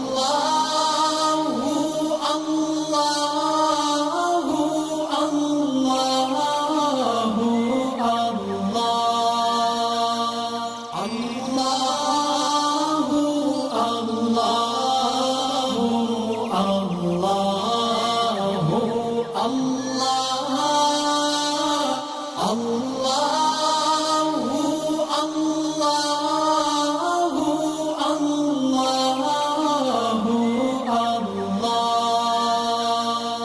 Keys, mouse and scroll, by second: 0.3 space, 0.8-1.7 drag, 2.4 alt+scroll down 2, 2.7 click, 3.1-3.5 alt+scroll down 2, 3.9 space, 4.0 click, 6.7 alt+scroll up 1, 7.6 ctrl+click, 9.1 alt+scroll up 2, 9.4 click, 9.5 scroll down 2, 9.9 alt+Num_Lock, 9.9 click, 10.0 scroll up 2, 10.3 click, 10.6 alt+scroll down 1, 11.0 click, 11.1 click, 11.9 click, 12.3 click, 13.1 click, 13.5 shift+click, 13.9 space, 14.1 alt+scroll up 1, 14.2 click, 14.5 shift+click, 14.9 click, 15.3 shift+click, 15.4 ctrl+click, 15.9 shift+click, 16.0 ctrl+click, 16.5 shift+click, 17.3 ctrl+z, 17.4 click, 17.9 ctrl+click, 18.4 ctrl+click, 18.9 shift+right click, 19.0 shift+click, 19.1 ctrl+click, 19.4 shift+click, 19.6 ctrl+click, 19.7 click, 20.0 shift+click, 20.1 ctrl+click, 20.5 shift+click, 20.8 alt+scroll down 1, 20.9 space, 21.3 alt+scroll up 1, 21.4-21.8 click, 21.7 space, 21.9-22.5 drag, 26.5 alt+shift+scroll up 2, 26.5 shift+click, 27.1 alt+shift+scroll down 3, 27.3 ctrl+g, 27.4 alt+scroll up 2, 27.6 click, 28.1 alt+scroll down 1, 28.1 alt+scroll up 1, 28.4 click, 28.8 alt+scroll up 1, 29.0 click.